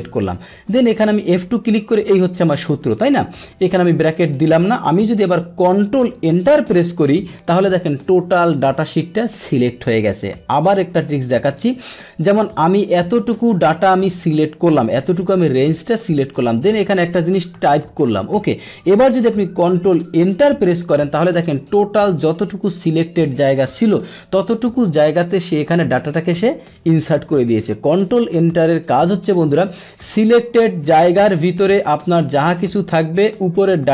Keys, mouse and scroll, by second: 1.4 F2, 3.7 BackSpace, 6.3 ctrl+Return, 10.1-11.8 middle drag, 12.5-14.0 drag, 15.4-16.4 drag, 20.4 ctrl+Return, 21.1 ctrl+Return, 27.3 Delete, 29.3-31.5 middle drag, 31.5 click, 32.4 click.